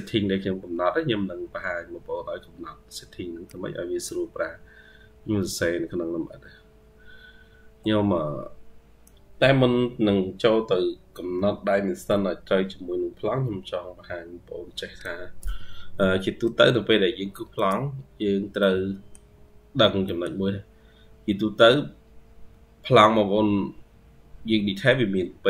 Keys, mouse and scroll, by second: 0.8-2.1 scroll up 21, 2.1-3.0 scroll up 5, 4.2-6.6 scroll down 140, 6.6-7.8 scroll down 46, 9.9-14.4 scroll up 252, 16.0-16.5 ctrl+scroll up 1, 18.1-18.4 scroll down 1, 18.4 middle click, 19.9 middle click.